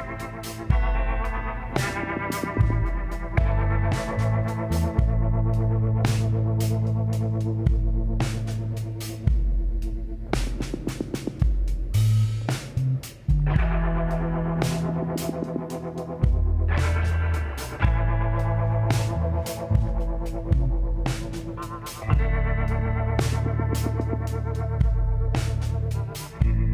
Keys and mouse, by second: 0.6 l, 1.6 l, 3.4 shift+d, 4.8 s, 9.5-11.3 drag, 11.3 s, 17.0-18.6 middle drag, 18.6 KP_7, 19.3 z, 23.7 middle click, 25.0 z.